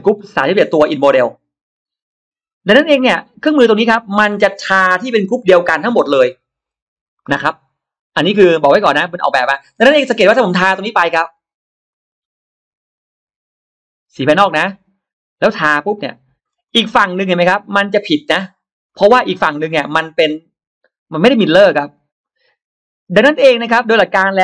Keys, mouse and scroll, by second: 6.9-9.5 middle drag, 9.6-9.9 scroll down 1, 10.8 click, 11.7 click, 14.4 click, 15.4 scroll up 1, 15.9 click, 16.3-16.6 scroll down 1, 16.6-17.8 middle drag, 18.8 middle click, 19.7-24.4 middle drag.